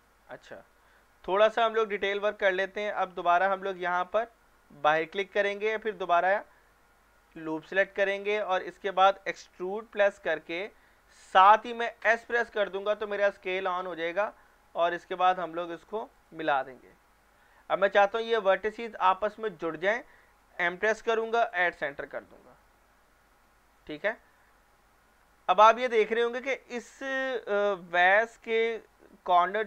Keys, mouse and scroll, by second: 0.2-0.9 scroll up 2, 1.1 shift+middle click, 1.5 scroll up 1, 5.0 click, 7.4 alt+click, 7.9-8.3 scroll down 1, 8.3-8.9 middle click, 8.8 scroll up 1, 9.7 e, 12.0 s, 16.2 click, 17.6 middle click, 18.0 scroll up 1, 20.6 m, 21.5 click, 24.3-25.5 alt+middle drag, 25.5-27.5 scroll up 2, 27.5-29.3 scroll down 1.